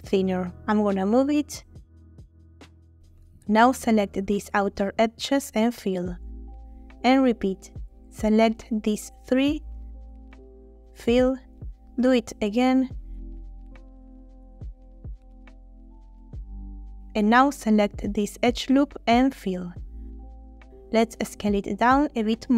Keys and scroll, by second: 4.2 2, 6.5 shift+f, 10.9 shift+f, 15.9 shift+f, 20.0 f, 20.9 a.